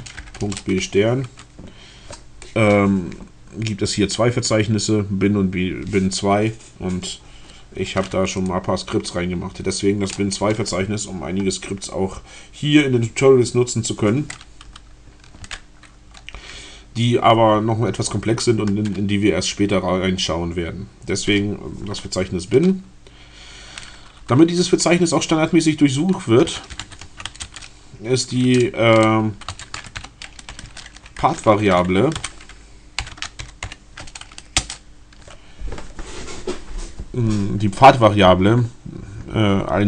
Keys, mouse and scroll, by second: 0.5 shift+Return, 26.1-27.7 typing, 29.0-34.1 typing, 34.6 Return.